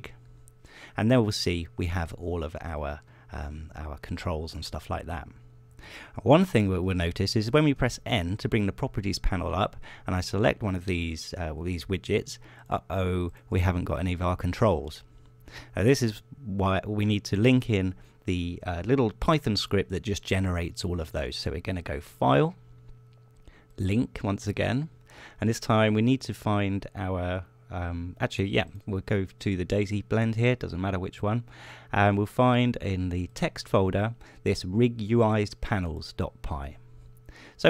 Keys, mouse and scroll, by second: 1.3 click, 9.2 n, 12.5 click, 14.1 click, 14.8 click, 23.8 click, 25.4 click, 27.8 click, 30.4 click, 35.1 click.